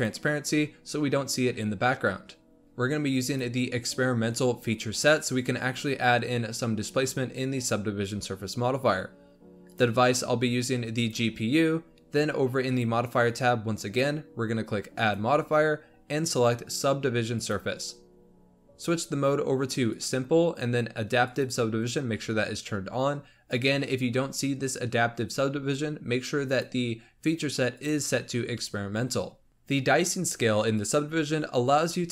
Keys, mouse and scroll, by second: 0.6-1.6 scroll down 3, 2.6-3.2 scroll up 1, 3.2-6.3 drag, 9.6-12.7 drag, 14.9 click, 17.5-17.9 drag, 19.9 click, 21.2 click, 26.4 click, 27.7-29.5 drag, 29.5-31.6 shift+middle drag.